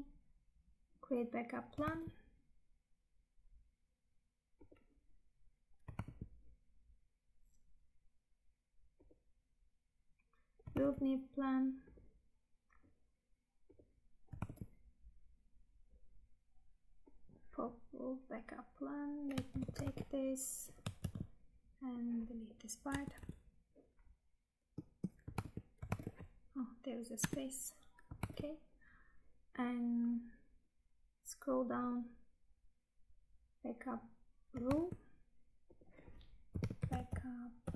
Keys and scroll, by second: 2.0 Tab, 6.2 Tab, 11.9 Tab, 14.6 Tab, 19.5 ctrl+c, 19.9 Tab, 21.0 ctrl+v, 24.7 space, 25.6 Tab, 28.4 Tab, 34.8 Tab.